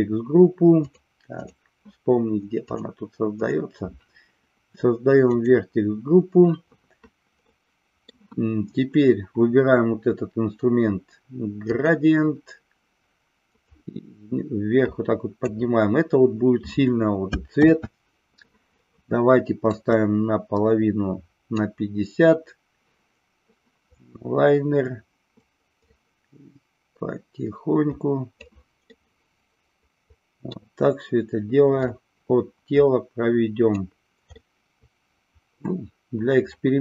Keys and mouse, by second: 0.8 click, 2.7 click, 3.3 click, 5.4 click, 7.5 middle click, 13.7-15.5 drag, 17.7 ctrl+z, 19.8-21.7 drag, 25.8-28.4 drag, 28.8-30.4 middle drag, 31.7-33.8 drag, 34.3-36.8 middle drag.